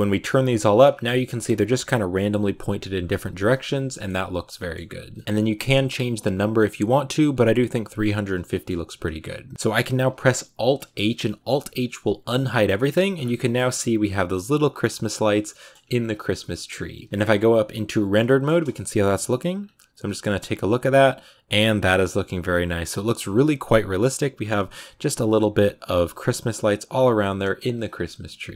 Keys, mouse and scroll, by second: 0.5 shift+middle click, 0.6 shift+scroll up 4, 2.9-3.5 scroll down 10, 3.8 shift+middle click, 4.7-5.0 scroll up 2, 5.0-6.2 shift+middle drag, 6.2-7.2 drag, 8.4 shift+middle click, 8.9-10.6 scroll down 1, 10.8 alt+h, 11.6 a, 12.4 scroll down 1, 12.7 shift+middle click, 13.0-14.9 scroll up 12, 13.3 shift+middle click, 15.4 shift+middle click, 15.7-16.2 scroll down 10, 16.4 shift+middle click, 17.0 z, 17.5-17.8 scroll down 3, 17.8 click, 18.1 shift+middle click, 19.1 ctrl+b, 20.1-20.5 scroll up 7, 21.2-23.3 scroll down 1, 23.3-24.1 scroll up 1, 26.8-27.1 scroll down 3, 28.3 ctrl+b.